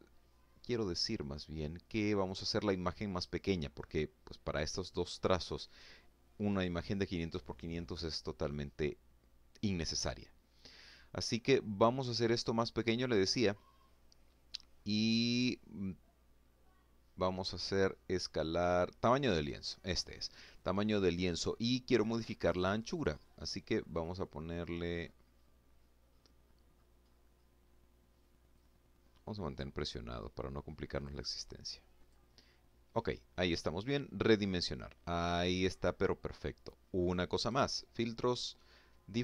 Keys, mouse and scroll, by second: 1.0 click, 18.1 click, 21.3 click, 22.8-23.2 scroll down 1, 23.7-24.4 scroll down 3, 25.2-27.3 scroll down 2, 27.3-28.5 drag, 29.6-31.0 drag, 32.2 click, 33.5 middle click, 36.1 click.